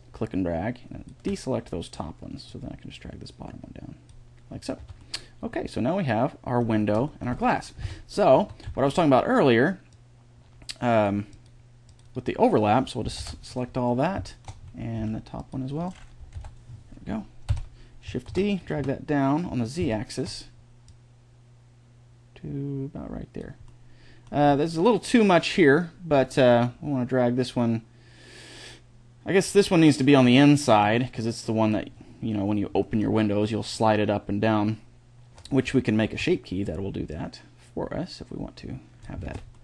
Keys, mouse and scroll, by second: 2.3-4.3 drag, 4.6 Tab, 7.7 Tab, 8.1 a, 8.5 c, 13.0 ctrl+l, 14.8 c, 16.1 ctrl+l, 17.3 KP_1, 18.1 shift+d, 21.7 click, 23.5 middle click, 24.3 middle click, 25.3 middle click, 29.9 middle click, 30.7-32.3 drag, 32.7 middle click, 33.5-35.2 drag, 35.9 ctrl+z, 36.9-38.7 drag, 39.1 ctrl+z.